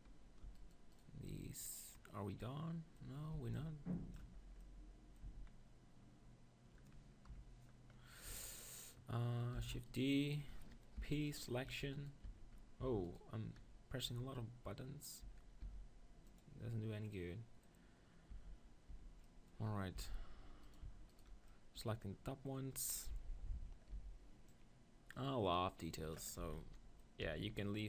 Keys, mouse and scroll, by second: 0.5-2.6 right drag, 2.1-3.3 middle drag, 3.3 b, 5.2 z, 7.3 KP_1, 9.6 shift+d, 11.0 p, 11.7 q, 11.9-15.1 drag, 12.3 q, 12.9 Tab, 14.0 s, 15.2-17.4 right drag, 15.2 Tab, 15.6 s, 16.4 click, 18.5 Tab, 18.9 Tab, 20.0 z, 20.6-22.9 drag, 23.1 middle click, 23.9 c, 26.3-27.8 drag, 26.4-27.8 typing.